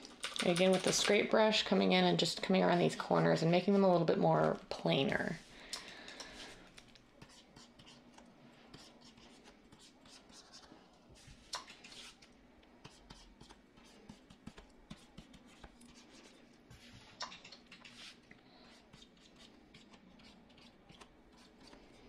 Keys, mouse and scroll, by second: 0.2-1.0 typing.